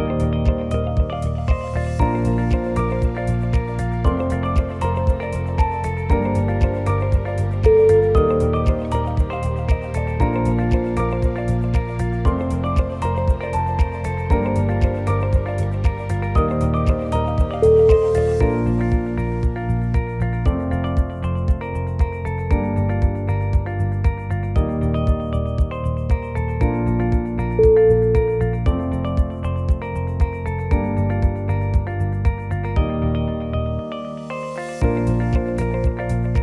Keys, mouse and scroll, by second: 3.2 scroll up 2, 3.4 middle click, 4.1 2, 4.6 click, 5.1 shift+click, 5.6 o, 5.9 middle click, 6.4 click, 6.6 click, 7.7 middle click, 8.3 middle click, 9.9 g, 13.7 middle click, 14.1 middle click, 14.2 middle click, 14.8 middle click, 17.0-17.3 scroll up 4, 17.4 shift+middle click, 18.1 click, 18.4 click, 19.7 click, 19.7 o, 20.1 g, 22.9 click, 23.3 g, 24.7 scroll down 2, 25.0 middle click, 26.3 click, 26.7 shift+click, 27.6 g, 29.2 click, 29.7 g, 30.6 scroll down 6, 30.9 middle click, 32.4-32.7 scroll up 6, 33.0 click, 33.9 click, 34.4 shift+click, 34.7 shift+click, 35.7 shift+click, 35.9 e.